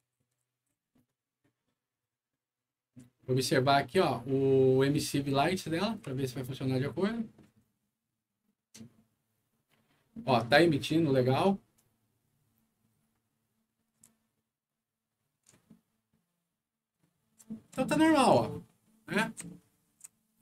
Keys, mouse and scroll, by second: 0.4 s, 13.9 d, 17.1-17.8 typing.